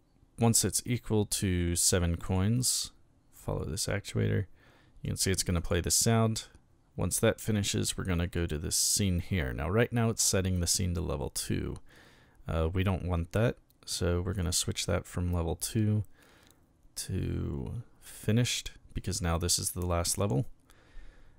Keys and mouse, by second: 0.5 click, 2.3 click, 5.1 click, 5.6 click, 8.3 click, 14.3 click, 18.0 click.